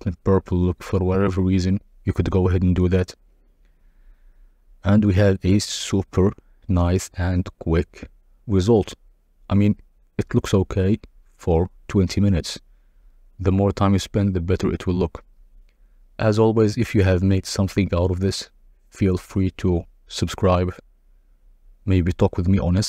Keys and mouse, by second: 1.3 KP_0, 3.2-4.8 drag, 7.8 click, 11.3 click, 13.4-15.6 drag, 19.5 click.